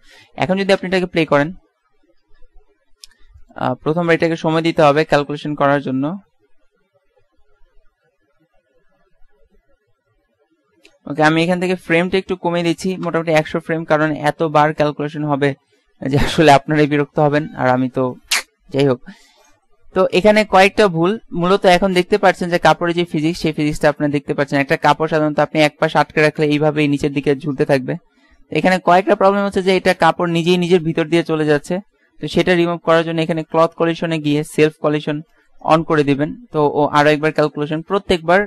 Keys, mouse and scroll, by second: 0.9 alt+a, 3.6 click, 4.6 click, 12.9 KP_0, 21.2-23.9 middle drag, 28.3-29.7 middle drag, 31.0-32.0 middle drag, 32.7 middle click, 33.5 click, 33.8 click, 34.1 click.